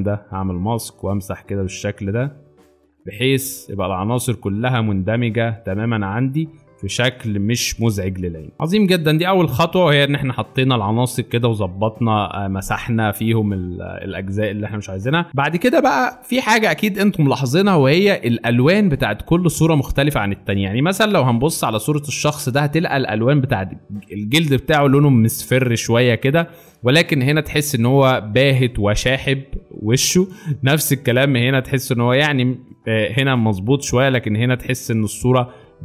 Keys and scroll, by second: 2.3 space, 15.8 space, 17.1 alt+space, 18.7 alt+space, 20.2 alt+space, 26.2 space, 27.2 alt+space, 31.2 alt+space, 31.9 alt+space, 33.6 space, 34.4 alt+space.